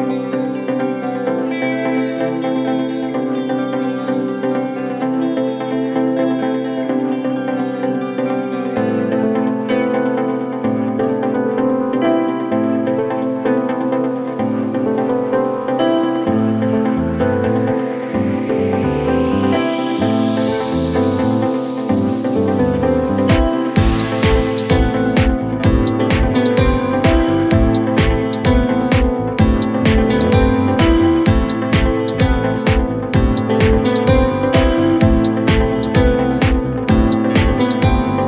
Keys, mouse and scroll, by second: 0.9 click, 1.8 click, 7.7 click, 8.9 click, 9.7 click, 9.7 ctrl+d, 11.5 right click, 12.4 click, 12.8-14.2 typing, 14.4 Return, 16.1 click, 17.5-19.4 typing, 18.4 click, 19.4 Return, 21.0 click, 21.4 a, 22.5 typing, 24.6 click, 25.1 click, 25.9 click, 26.3-27.1 typing, 29.5 click, 31.2 click, 32.2 click, 34.5 click, 36.1 click, 36.2-37.1 typing.